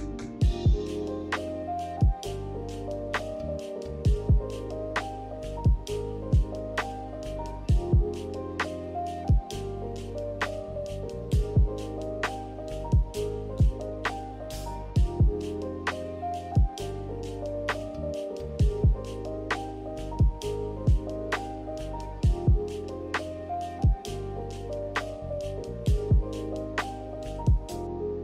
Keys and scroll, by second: 0.0-0.4 typing, 0.7 ctrl+c, 0.9 ctrl+v, 5.4 n, 6.4 a, 8.5-9.4 typing, 11.4-12.5 typing, 16.6 ctrl+h, 21.9 ctrl+h, 22.7 ctrl+h, 25.7 b.